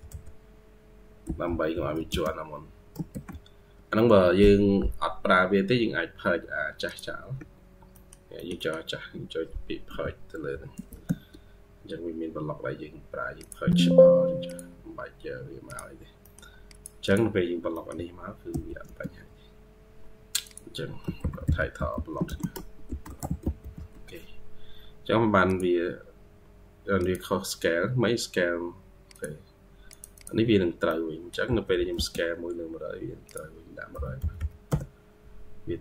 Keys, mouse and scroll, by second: 1.1-1.6 typing, 3.0 typing, 7.2 Escape, 7.5 scroll down 1, 7.8 middle click, 8.2 middle click, 8.4 middle click, 16.1 middle click, 16.9 double click, 17.3 scroll up 2, 17.6 middle click, 18.4 typing, 18.8-19.4 scroll up 1, 19.4 typing, 21.6-24.0 typing, 30.0 double click, 30.7 middle click, 31.3-34.7 typing, 32.1 scroll up 1, 35.7-35.8 scroll down 7.